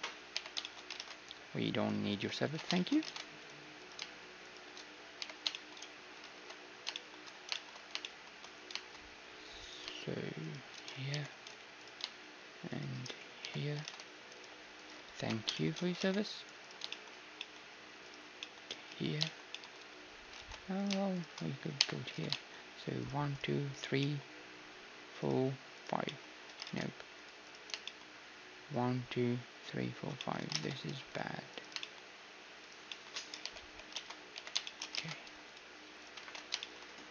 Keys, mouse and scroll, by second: 0.3 j, 1.0 ctrl+Tab, 1.5 middle click, 2.1-6.2 right drag, 2.5 ctrl+x, 2.7-4.4 drag, 3.0 ctrl+Tab, 4.5 middle click, 5.2 j, 5.5-6.5 drag, 6.3 ctrl+Tab, 7.9 middle click, 9.5-10.6 middle drag, 9.6-19.8 right drag, 11.1 j, 13.4 j, 13.8 ctrl+Tab, 15.2 ctrl+x, 15.5-17.3 middle drag, 16.0 ctrl+Tab, 17.3-19.5 drag, 18.9 j, 19.5 middle click, 19.8 click, 20.4 ctrl+z, 20.8-21.8 drag, 21.8 right click, 21.8 j, 22.1 a, 22.3 click, 22.4-26.1 right drag, 22.8 middle click, 25.0 click, 26.1-29.5 drag, 26.1-29.9 middle drag, 26.7 ctrl+Tab, 30.2-33.5 middle drag, 30.5 ctrl+Tab, 31.5-35.0 drag, 33.5-34.5 right drag, 33.5 h, 34.0 ctrl+z, 34.3 j, 35.0 ctrl+Tab, 35.0-36.0 middle drag, 36.0-37.1 drag, 36.0-37.1 right drag, 36.2 ctrl+x.